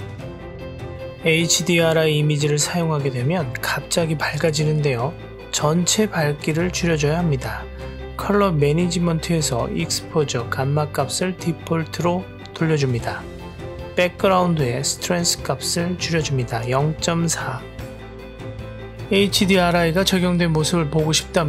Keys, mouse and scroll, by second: 1.8-3.0 drag, 4.9 click, 5.7-7.6 scroll down 1, 7.6-9.2 drag, 10.2-11.2 drag, 12.2-12.6 middle drag, 13.4 click, 14.5-15.9 drag, 17.9 click, 18.3-19.9 middle drag, 20.6 click.